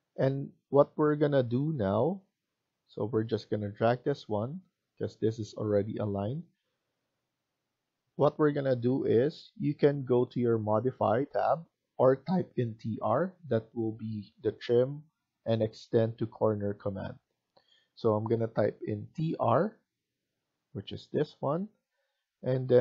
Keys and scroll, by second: 0.7 Escape, 6.0 Escape, 19.0-19.4 typing.